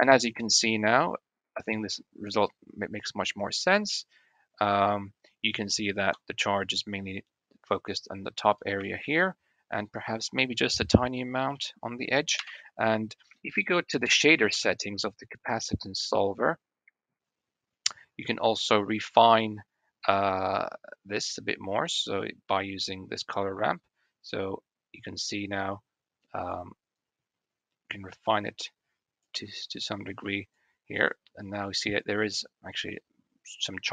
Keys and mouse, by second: 5.9 space, 8.7 shift+middle drag, 9.1-9.5 middle drag, 11.4-11.7 middle drag, 12.2 KP_1, 13.2 shift+middle drag, 13.8 middle click, 15.2 middle click, 15.4 middle click, 16.5-17.7 drag, 18.9-20.7 drag, 21.7 click, 23.6-26.4 drag, 26.8-29.1 drag, 29.6 click, 30.9-31.5 drag.